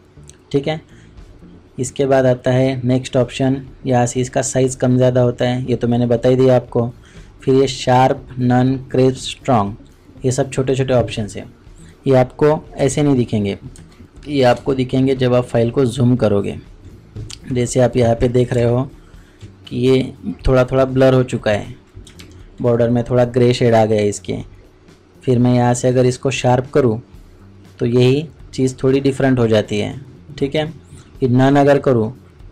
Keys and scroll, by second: 14.4 shift+u, 14.5 ctrl+space, 22.1 ctrl+KP_Subtract.